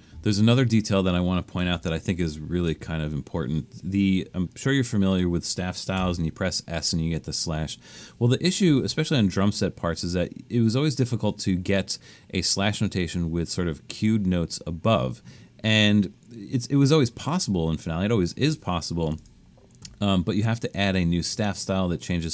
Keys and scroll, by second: 1.8 super+=, 2.2 super+=, 6.0 s.